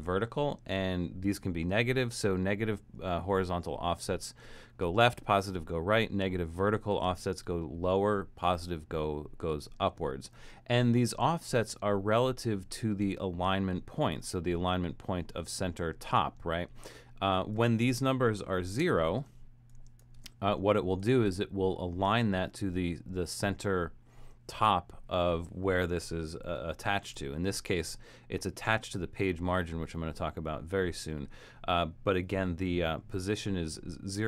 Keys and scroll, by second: 18.8 0, 20.2 typing, 27.0 shift+Return.